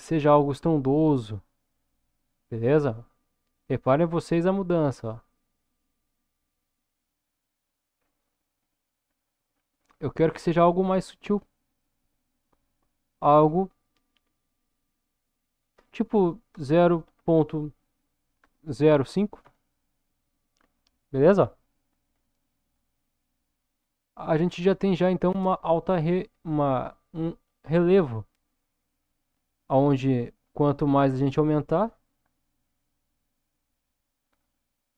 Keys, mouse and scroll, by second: 7.9 scroll down 1, 8.5-9.3 middle drag, 9.5-11.0 scroll up 2, 11.6-13.2 middle drag, 15.1-22.3 drag, 23.8 scroll up 1, 24.8 scroll down 1, 25.5-27.5 middle drag, 29.9-34.9 drag.